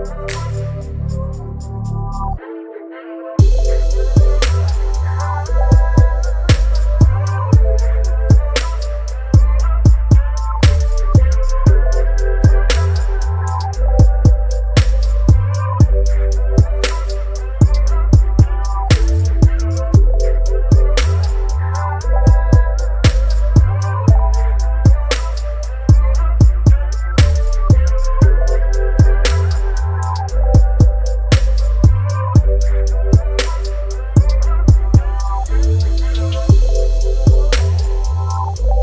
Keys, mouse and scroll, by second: 0.0 right click, 1.3 click, 4.2 click, 4.9 right click, 5.6-19.2 drag, 20.0-21.9 drag, 21.6-22.5 typing, 23.0 Return, 25.2 click, 27.4 click, 29.5 right click, 30.8-38.8 drag.